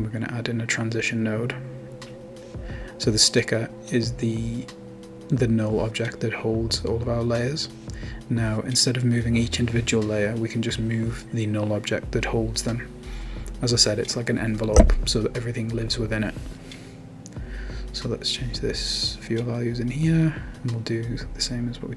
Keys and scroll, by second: 6.1-7.3 typing, 12.4 Tab, 12.9-13.8 typing, 14.9-17.3 typing, 17.5 Return, 18.8 typing, 18.9 Return.